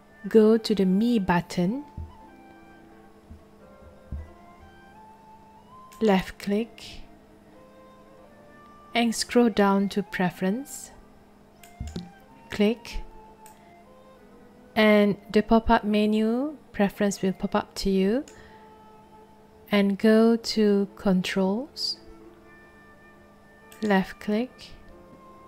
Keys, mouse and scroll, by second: 5.9 click, 11.6 click, 13.4-18.2 drag, 23.7 click.